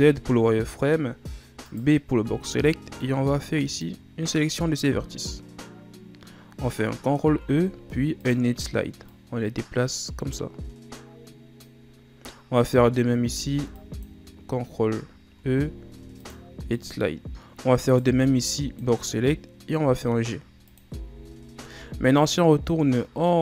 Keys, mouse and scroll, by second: 1.8 right click, 2.4 b, 7.5 ctrl+e, 12.8 right click, 13.5 b, 15.6 ctrl+e, 17.3 right click, 18.0 right click, 18.4 b, 19.3-20.0 scroll up 1, 20.0 g, 21.1 z, 21.9 Tab, 22.7 scroll down 2.